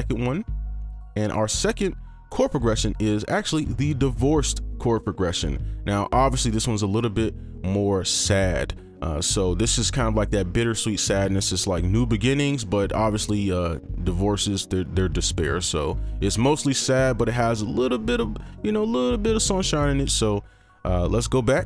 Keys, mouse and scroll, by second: 3.1-3.5 scroll up 1.